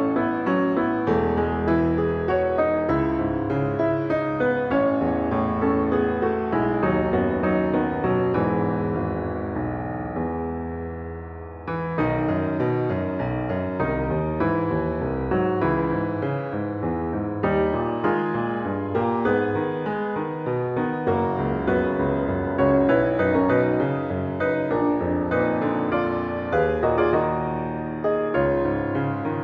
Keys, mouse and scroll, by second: 6.3 ctrl+Up, 8.5 ctrl+Up, 25.1 ctrl+a.